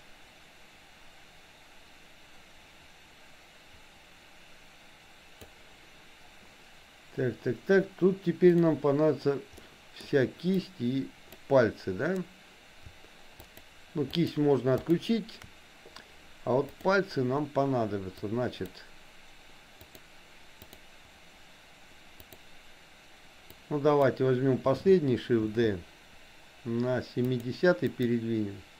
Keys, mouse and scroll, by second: 9.6 middle click, 10.6 click, 13.4 shift+click, 14.3 shift+click, 14.8 shift+click, 18.1 click, 20.0 click, 20.8 click, 22.3 click, 23.5 click, 25.5 shift+d, 27.9 click.